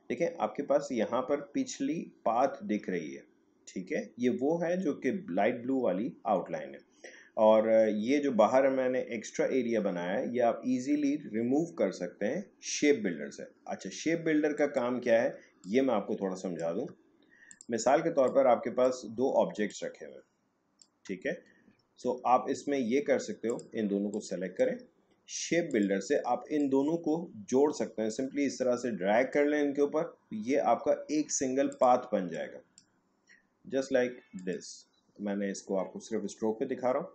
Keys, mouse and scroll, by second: 14.5 click, 15.8 space, 17.5 click, 18.5-19.7 shift+drag, 19.9-21.9 shift+drag, 21.9-22.5 alt+scroll up 1, 23.4-34.4 drag.